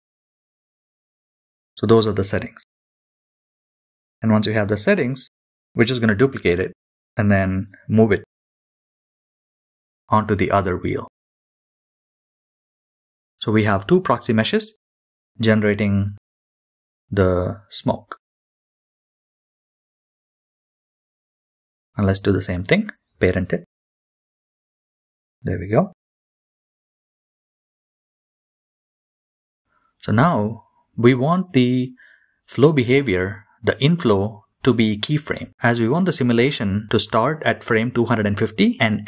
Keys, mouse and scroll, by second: 1.4 scroll up 1, 3.4 KP_3, 4.9-5.4 scroll down 3, 6.1-6.5 shift+middle drag, 7.8 shift+d, 9.9 g, 15.2 g, 17.5 shift+click, 19.5 ctrl+p, 22.2-22.7 scroll down 3, 23.6 click, 24.0 shift+middle click, 24.6 g, 30.6-35.4 drag.